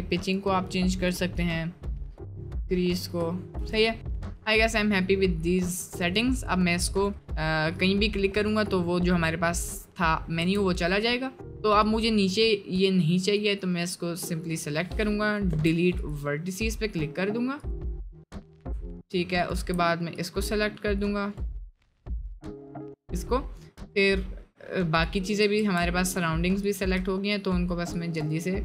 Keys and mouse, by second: 4.2 right click, 4.9-6.2 middle drag, 7.1 middle click, 8.0 middle click, 8.4 click, 9.2 middle click, 10.4 Tab, 12.8 click, 13.5 click, 15.5 Delete, 17.5 click, 18.0 middle click, 19.0 alt+click, 19.5 alt+click, 20.2-21.4 drag, 22.1 click, 25.6 ctrl+z, 26.7 click, 28.0 ctrl+click.